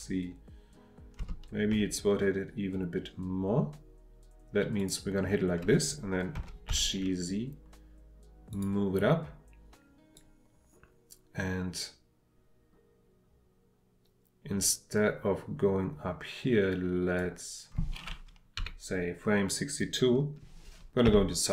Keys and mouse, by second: 4.8 click, 8.5 click, 10.2-16.8 drag, 18.6 Left, 21.1 KP_3.